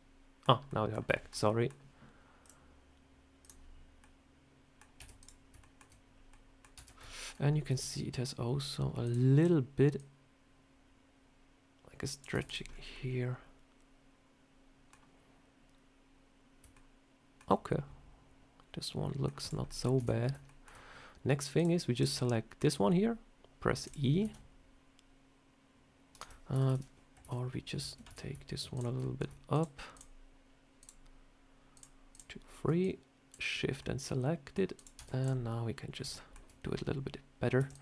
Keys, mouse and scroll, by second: 0.6 middle click, 1.0 shift+middle click, 1.4 middle click, 2.3 click, 3.9 middle click, 4.9 Tab, 5.1 click, 5.5 shift+middle click, 6.2 middle click, 6.6 Tab, 7.0 shift+middle click, 7.4 scroll down 2, 7.7 ctrl+r, 9.8 click, 12.2 Tab, 12.3 click, 12.6 scroll down 3, 12.8 middle click, 17.5 middle click, 19.3 click, 19.6 middle click, 19.9 Tab, 20.1 scroll up 2, 20.4 shift+middle click, 21.5 click, 21.8 click, 22.1 middle click, 23.6 e, 24.1 s, 26.4 ctrl+z, 26.6 ctrl+z, 28.0 Tab, 28.6 shift+click, 28.9 middle click, 29.4 shift+click, 32.7 shift+click, 33.7 middle click, 34.6 click, 34.9 Tab, 35.1 click, 35.8 scroll up 1, 36.0 shift+middle click, 37.5 e.